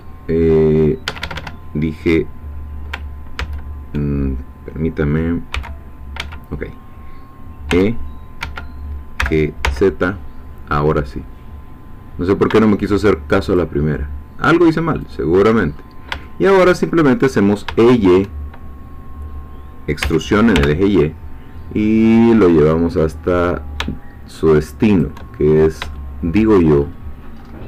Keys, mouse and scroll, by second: 1.1 Escape, 3.4 ctrl+z, 5.5 g, 6.2 Escape, 7.7 e, 8.4 Escape, 9.2 g, 9.6 z, 13.4 shift+click, 15.2 shift+click, 15.7-16.0 shift+scroll down 1, 16.2-17.3 shift+middle drag, 17.4 shift+scroll down 1, 17.8 shift+middle click, 20.0 e, 20.6 y, 24.8 shift+click, 25.5-25.9 shift+scroll up 4, 26.0 shift+middle click, 26.8-27.6 shift+scroll up 3.